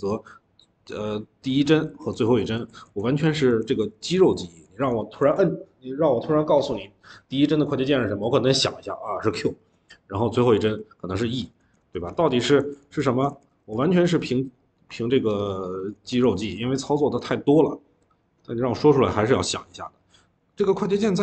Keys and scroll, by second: 0.9-5.1 typing, 11.4-14.4 typing, 15.8-17.4 typing.